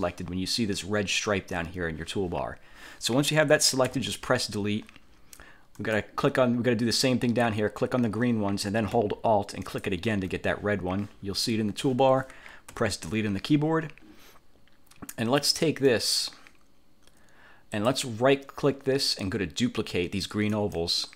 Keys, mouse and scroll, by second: 4.0 Delete, 5.9 click, 9.7 alt+click, 12.8 Delete, 15.9 click, 17.8 click, 20.6 click.